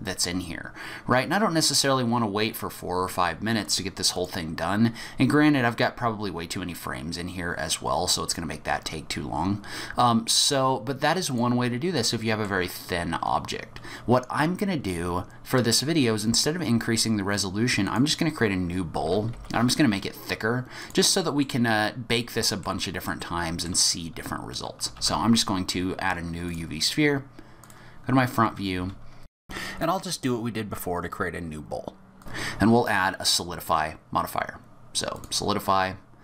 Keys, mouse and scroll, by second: 4.1 click, 10.4 click, 11.9 middle click, 12.6-13.5 scroll down 5, 17.8 click, 19.0 g, 21.2 middle click, 21.8 scroll up 1, 22.2 middle click, 23.0 middle click, 24.9 shift+a, 27.6 click, 28.7-31.5 typing, 29.8 middle click, 30.0 click, 30.5 Tab, 30.7 click, 31.2 middle click, 31.4 Tab, 31.7 shift+middle click, 31.8 right click, 32.1 click, 32.2 click.